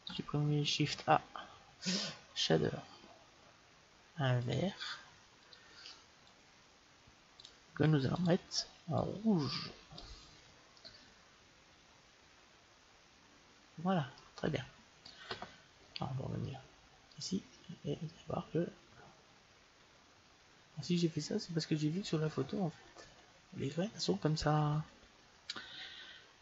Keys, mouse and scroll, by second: 0.6 shift+a, 6.1-10.0 drag, 10.7-12.6 middle drag, 17.2-18.9 drag, 18.5-20.1 middle drag, 21.7 middle click.